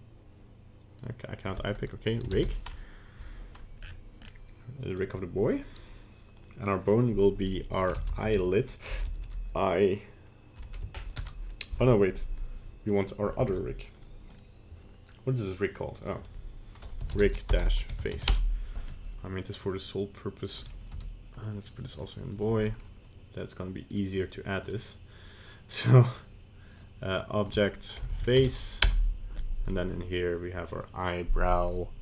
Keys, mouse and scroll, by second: 9.1 BackSpace, 9.3 BackSpace, 13.5 ctrl+Tab, 14.3 right click, 16.0 click, 16.1 click, 20.9 m, 22.3 right click, 23.9 right click.